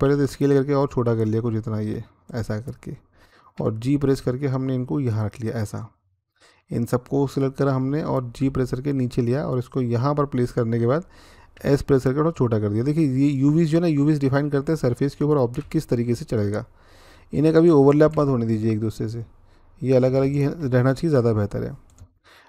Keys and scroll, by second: 3.4-4.0 typing, 8.2 g, 11.3 s, 15.4 g, 17.9 s.